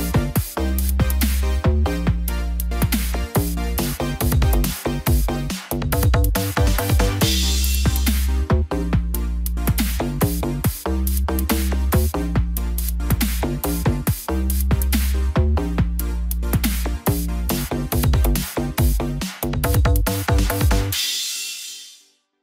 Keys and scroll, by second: 5.4 ctrl+t.